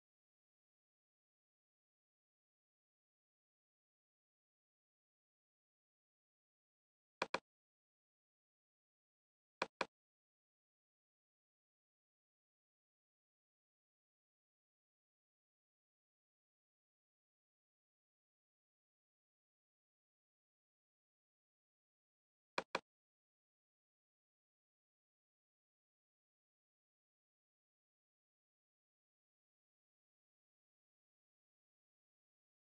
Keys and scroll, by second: 1.6 ctrl+space, 3.8 ctrl+space, 12.1 ctrl+alt+space, 13.4 ctrl+alt+space, 13.9 ctrl+alt+space, 18.1 ctrl+alt+space, 24.3 ctrl+space, 26.4 ctrl+space, 28.2 ctrl+space, 31.2 ctrl+space.